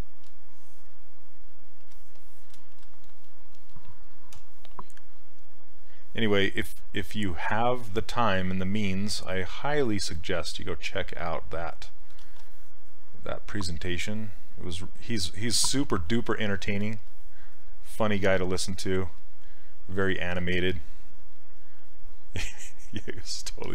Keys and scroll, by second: 4.4 w, 12.3 ctrl+z.